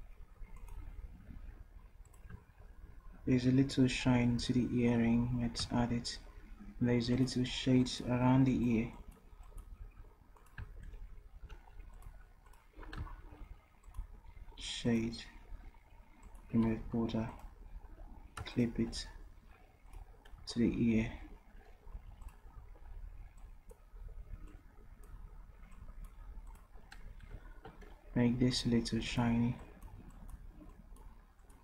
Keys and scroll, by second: 16.9 v, 22.5 d.